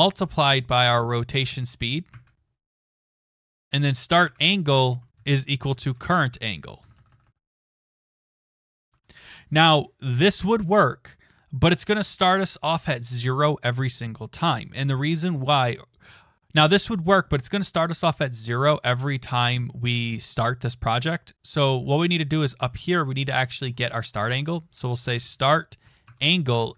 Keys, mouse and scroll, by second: 0.3 Right, 0.3-1.3 typing, 2.1 Tab, 2.9-9.0 typing, 4.2 Tab, 20.0 click, 20.4 click, 21.2 click, 22.3 click, 24.5-26.7 typing.